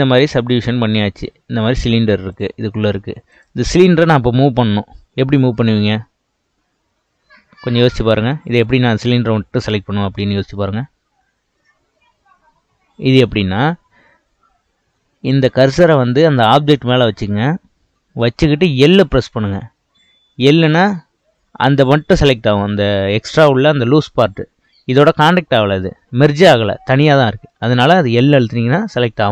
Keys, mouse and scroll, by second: 0.6 Tab, 1.6 Tab, 2.3 click, 3.3 click, 19.0 l.